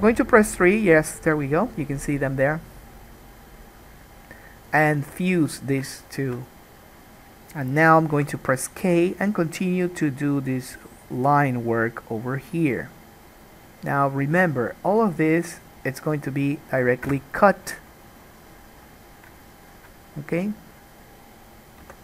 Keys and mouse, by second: 0.0-4.8 middle drag, 0.0 3, 4.8 click, 5.0-19.4 alt+middle drag, 5.1 alt+a, 8.3 k, 19.4 shift+click, 20.0-22.0 middle drag, 21.9 k.